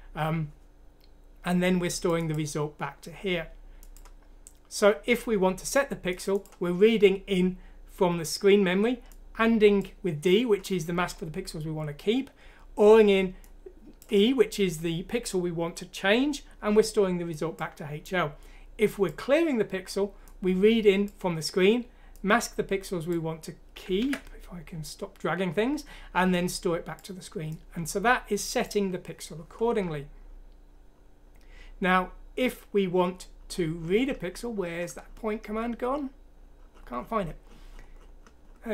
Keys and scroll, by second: 24.0 ctrl+z.